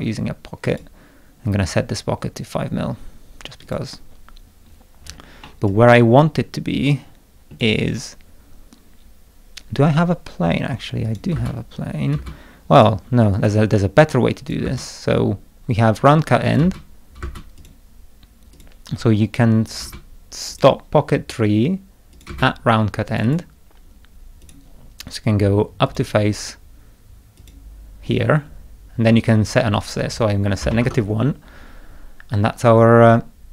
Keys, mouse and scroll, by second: 0.7 click, 3.6 click, 4.7 scroll down 2, 5.0 scroll up 2, 5.4-7.5 middle drag, 5.7-7.6 drag, 11.0 click, 11.3 space, 12.1 space, 13.3 click, 14.4 click, 14.6 space, 16.4 click, 16.6 space, 17.2 space, 17.6 click, 18.5 click, 19.7 click, 19.8 space, 20.5 click, 22.1 click, 22.3 space, 23.1 click, 23.2 click, 24.4 click, 25.8 click, 27.4 click, 29.7 click, 30.4-31.2 typing.